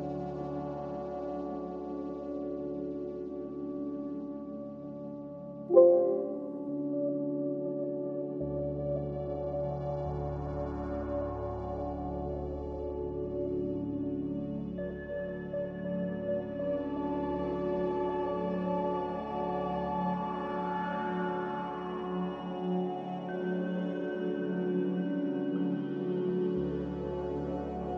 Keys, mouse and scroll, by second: 14.5 Delete, 16.3 Delete.